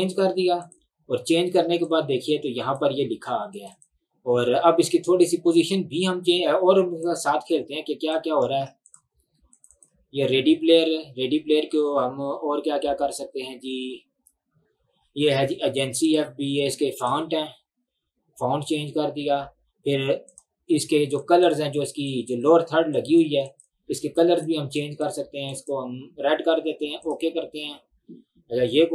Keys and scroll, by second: 8.6 ctrl+z.